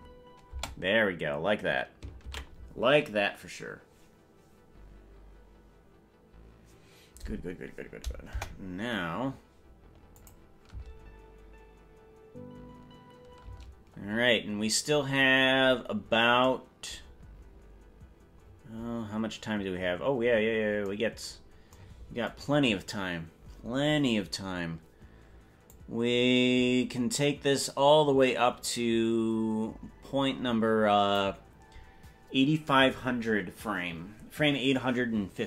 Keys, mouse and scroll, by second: 0.8 space, 5.8 ctrl+s, 8.4 KP_0, 10.4 click, 10.8 space, 13.8 space, 15.4 scroll up 1, 15.6-16.4 scroll down 15, 17.2-17.8 scroll down 2, 18.6-19.0 scroll down 2, 18.8 scroll up 1, 19.0-19.6 scroll down 3, 20.0 scroll down 1, 25.9-31.4 drag.